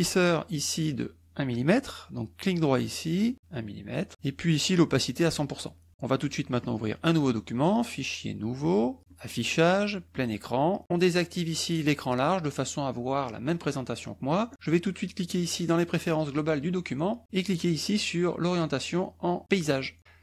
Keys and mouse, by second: 3.1 right click, 6.6 click, 8.7 click, 9.0 click, 10.1 click, 10.8 click, 14.5 click, 16.0 click.